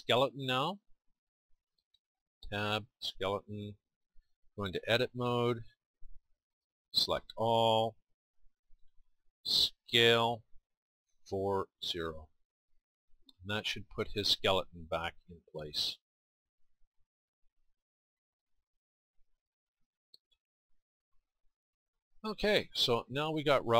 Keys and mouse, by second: 0.4-2.2 drag, 2.2 Tab, 5.0 Tab, 7.3 a, 8.0 a, 9.8 s, 13.0 middle click.